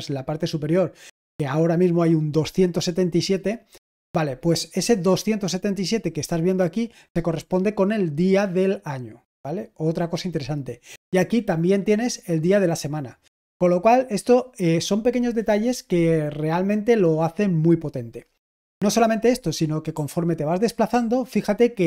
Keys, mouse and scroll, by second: 20.8 typing.